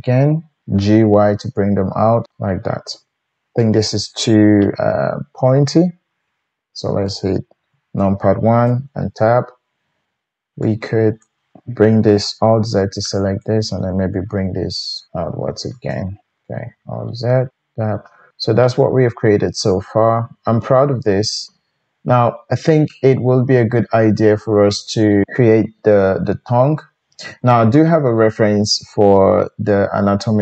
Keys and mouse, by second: 0.7 g, 2.3-10.6 shift+middle drag, 2.9 Tab, 7.6 KP_1, 8.7 Tab, 10.6-16.0 drag, 12.5 alt+z, 14.2 g, 16.0-30.4 alt+middle drag, 16.4 alt+z, 17.5 Tab.